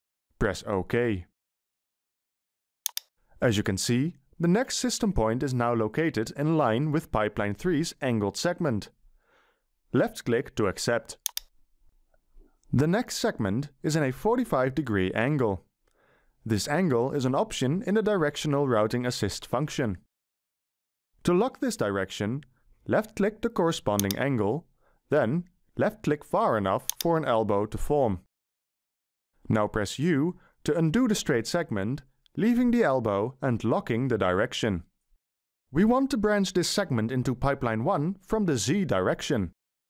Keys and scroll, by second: 30.3 u.